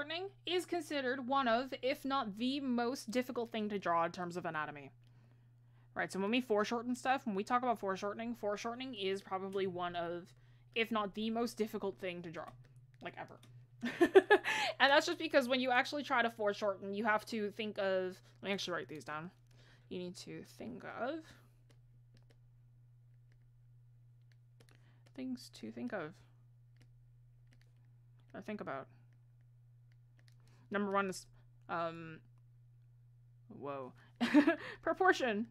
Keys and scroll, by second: 21.2 ctrl+z.